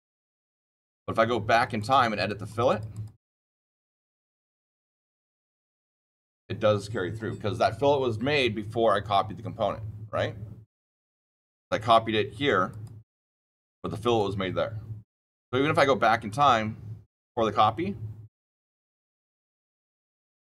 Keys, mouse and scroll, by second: 1.7 click, 2.1 click, 2.4 click, 2.6 click, 2.8 click, 4.2 click, 5.6 click, 12.6 click, 14.0 click, 16.2 click, 19.8 click.